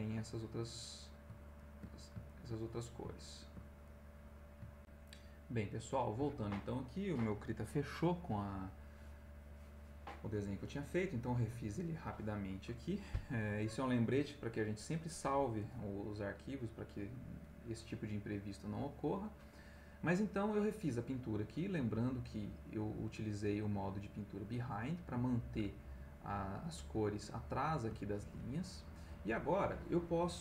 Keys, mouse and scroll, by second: 1.6 ctrl+click, 2.2 ctrl+click, 3.4 ctrl+click, 3.8 ctrl+click, 4.8 click, 5.8 click, 18.1 middle click, 19.5 middle click, 21.3 middle click, 24.9 ctrl+middle click, 26.2 middle click, 26.7 middle click, 27.6-29.3 middle drag.